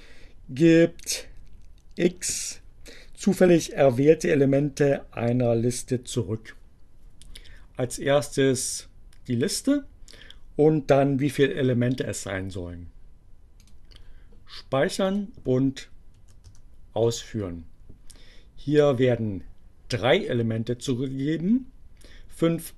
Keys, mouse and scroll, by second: 13.7 click, 14.9 click, 16.2 Up, 16.5 Return.